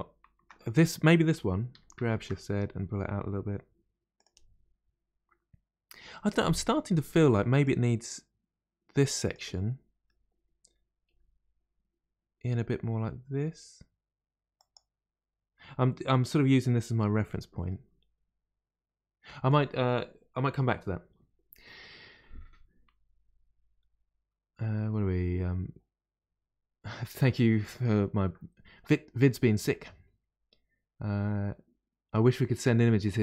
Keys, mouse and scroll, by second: 1.7 g, 1.7 g, 6.5-7.6 middle drag, 7.6 click, 9.3 click, 9.6-11.1 middle drag, 11.1 g, 11.1 g, 17.7-20.7 middle drag.